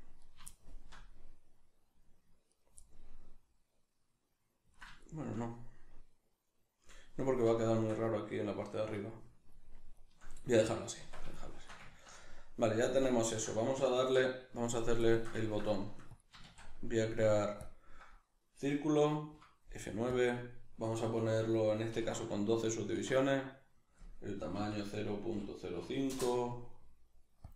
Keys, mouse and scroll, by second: 0.2 right click, 0.5-2.5 shift+middle drag, 2.5 right click, 2.8-16.1 middle drag, 11.0 Tab, 14.0 alt+q, 16.1 click, 16.4 shift+a, 19.3 F9.